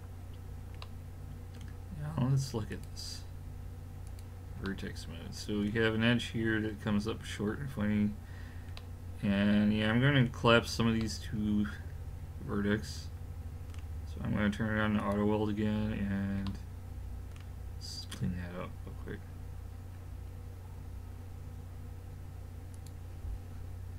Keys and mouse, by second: 2.7-5.8 drag, 11.0 middle click, 12.1 middle click, 15.0 click, 20.0-22.8 middle drag, 22.8 click.